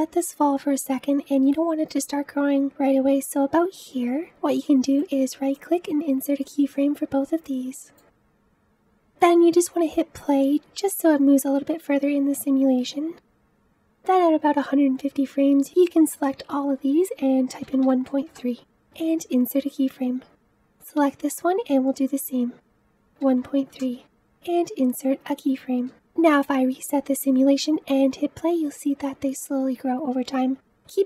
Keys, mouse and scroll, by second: 4.0 space, 6.0-7.0 right drag, 7.0 click, 8.6 right click, 9.3 space, 12.3 space, 18.5 click, 19.2-20.5 right drag, 20.5 click, 23.8 click, 24.7-25.9 right drag, 25.9-27.3 drag, 27.3 space.